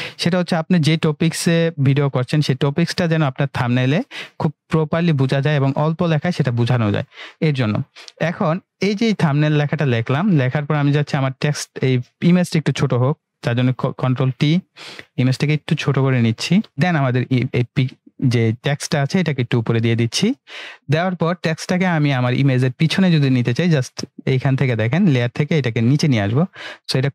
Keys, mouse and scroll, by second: 8.4 click, 11.2 click, 13.4 ctrl+t, 14.9-16.7 drag, 22.4-25.8 drag.